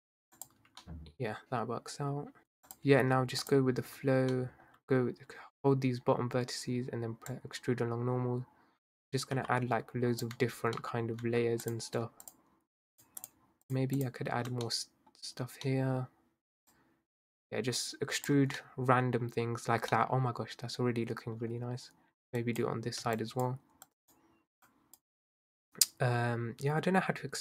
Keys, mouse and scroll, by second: 0.7 Tab, 0.8-2.4 middle drag, 2.7 click, 3.5 alt+shift+click, 4.3-7.3 middle drag, 7.3 click, 10.4 Tab, 10.8 middle click, 11.1 scroll up 1, 11.3 Tab, 11.7 click, 12.3 shift+click, 13.0 shift+click, 13.2 shift+drag, 13.7 shift+click, 14.0 shift+click, 15.3-15.7 scroll down 1, 15.7-16.7 middle drag, 16.7 click, 18.4 Tab, 18.6-21.5 middle drag, 21.5 Tab, 22.4 click, 23.1 shift+click, 23.9 shift+click, 24.7 shift+click, 25.9 click.